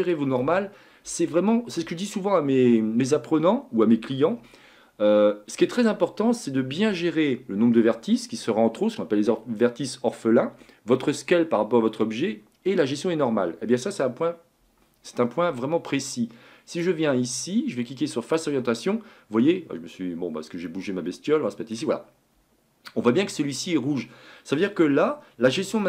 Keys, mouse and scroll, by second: 16.7-18.8 drag, 18.8-19.7 scroll up 4, 19.7-20.7 scroll up 2, 20.7-23.7 middle drag, 24.9-25.4 scroll down 1, 25.4-25.8 scroll up 2.